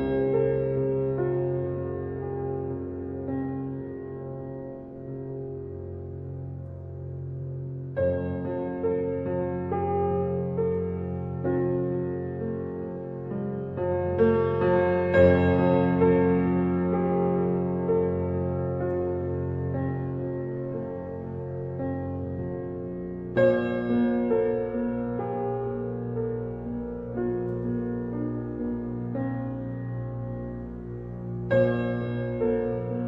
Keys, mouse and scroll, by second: 7.8 g, 9.0-10.2 middle drag, 10.2 r, 15.7 KP_3, 17.7 Tab, 19.3 click, 20.4 s, 25.5 g, 28.1 click, 29.6 r, 32.1 g.